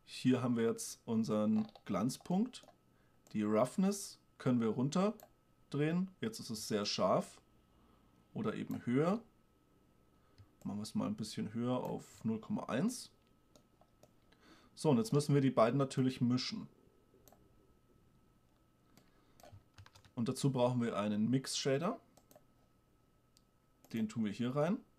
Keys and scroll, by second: 20.0 shift+a.